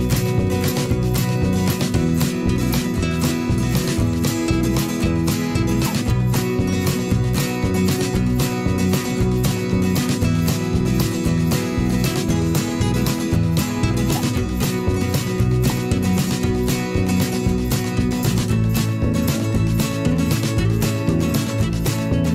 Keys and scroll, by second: 0.6 ctrl+d, 4.8 a, 8.0 ctrl+z, 9.0 v.